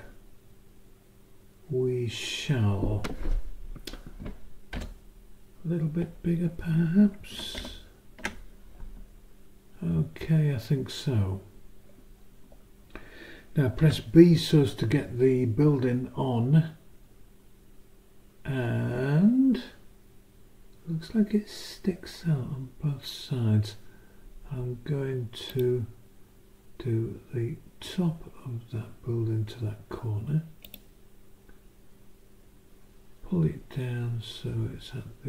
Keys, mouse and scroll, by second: 7.6 ctrl+Up, 13.8 b, 25.5 click, 30.6 click.